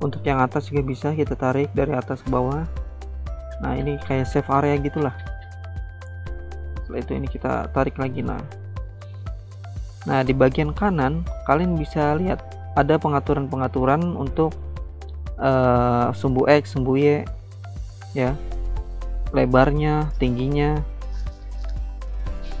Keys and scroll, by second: 13.9 ctrl+z, 18.4 ctrl+z.